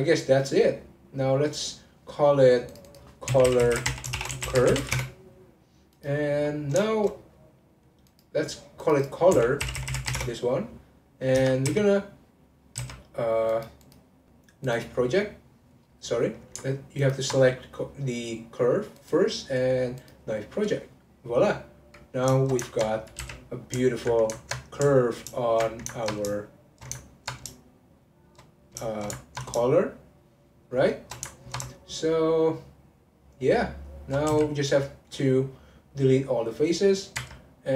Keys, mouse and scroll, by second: 0.7 click, 1.2 click, 2.7 click, 2.8 click, 3.7 l, 5.9 click, 6.5-6.8 scroll down 1, 6.8-8.0 shift+middle drag, 8.0 click, 8.8 click, 9.0 click, 9.9 l, 11.3 Tab, 11.6 a, 12.8 a, 13.5 click, 13.8-16.8 drag, 17.0 ctrl+click, 18.9-22.0 drag, 22.4 ctrl+shift+middle click, 22.9 click, 23.2 3, 23.9 alt+click, 24.3-25.4 ctrl+middle drag, 25.4 alt+shift+click, 25.9 ctrl+middle click, 26.6 shift+click, 27.0 ctrl+middle click, 27.9 shift+click, 28.6 ctrl+z, 28.9-30.0 shift+middle drag, 30.0 shift+click, 30.6 shift+click, 31.3 ctrl+middle click, 32.1 shift+click, 33.2 shift+click, 33.8 shift+click, 34.2 x.